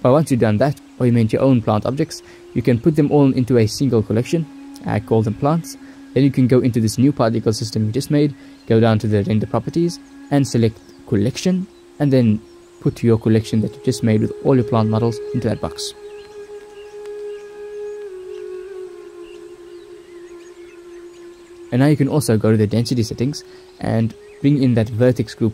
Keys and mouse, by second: 0.0 0, 1.8-3.3 drag, 4.4-5.4 drag, 6.1-7.9 drag, 9.1 click, 10.0 shift+middle click, 10.3 shift+middle click, 11.4 click, 12.0 middle click, 12.2 click, 12.3 middle click, 12.8-14.2 drag, 14.2 ctrl+s, 14.7 click, 16.2 click, 16.9-18.1 middle drag, 20.5 middle click, 20.8 click, 21.2 middle click, 21.5 click, 21.5 middle click, 21.6 click, 21.6 middle click, 22.0 ctrl+s, 25.0 middle click.